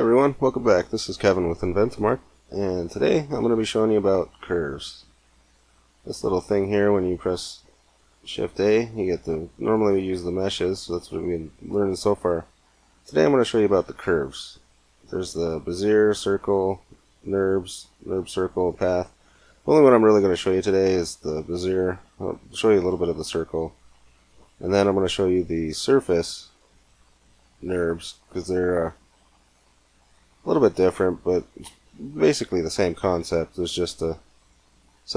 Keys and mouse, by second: 2.4 middle click, 3.3 shift+a, 7.7 shift+a.